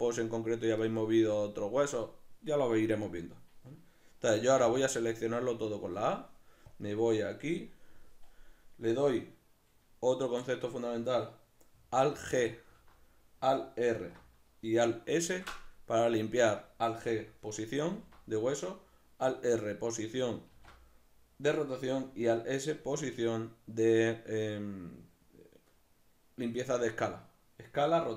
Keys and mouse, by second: 4.6 a, 6.7-28.1 drag, 12.4 alt+g, 13.9 alt+r, 20.5 alt+r.